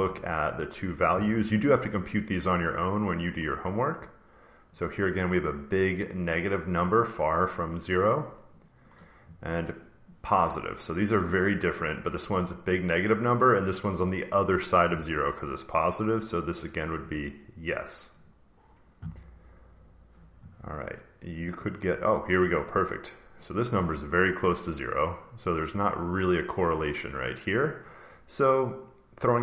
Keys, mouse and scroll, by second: 3.4 click, 5.1 click, 8.5 click, 10.5 click, 11.7 click, 12.0 click, 12.2 click, 12.4 click, 13.5 click, 14.1 click, 16.4 click, 18.1 click, 19.7 click, 21.2 click, 25.3 click, 26.2 click, 26.9 click.